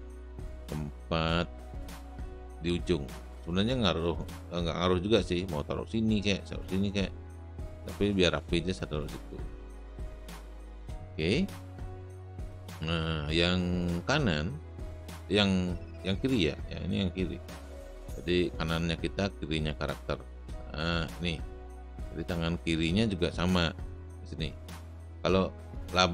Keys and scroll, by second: 10.4 space.